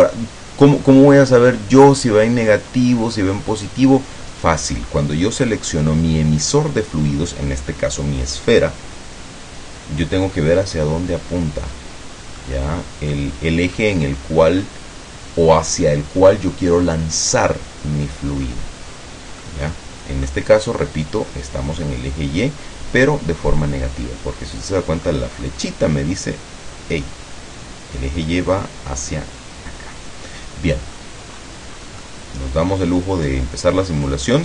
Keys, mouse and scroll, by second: 1.3 scroll up 1, 12.5-13.4 middle drag, 13.9-17.1 middle drag, 18.5-18.8 scroll up 1, 19.1 scroll down 2, 19.5-20.5 middle drag, 25.2 middle click, 30.4-31.3 middle drag, 31.5 scroll up 2, 31.9 scroll down 2, 32.1-33.9 middle drag, 34.1 scroll up 2.